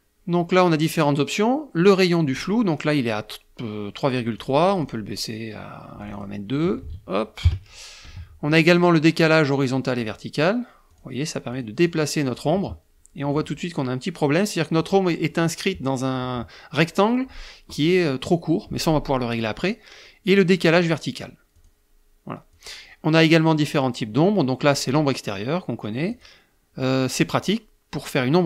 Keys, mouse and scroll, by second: 4.2 click, 4.4 click, 5.7 click, 6.5 ctrl+a, 9.7 click, 10.6 click, 11.2 click, 11.6 click, 12.0 click, 20.4 click, 21.2 click, 22.2 click, 25.8 click.